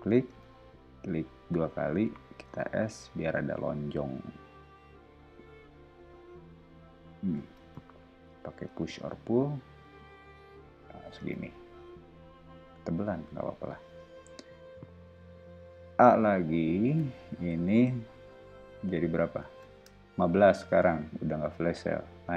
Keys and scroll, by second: 0.2 space, 2.4 s, 7.6 space, 8.7 p, 11.1 space, 16.8 super+a, 19.6-20.9 typing.